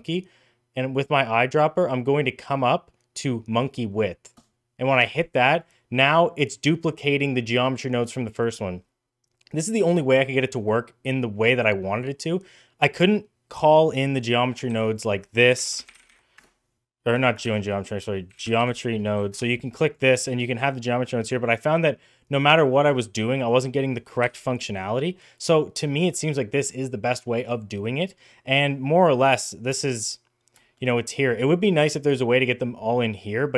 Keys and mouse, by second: 4.9 middle drag, 14.0 middle click, 14.6 shift+a, 17.3 shift+a, 23.3 click, 24.1 Delete, 25.0 middle click, 27.8-28.1 middle drag, 28.4 middle click, 29.6 shift+middle drag, 30.4 shift+middle drag, 32.5 click.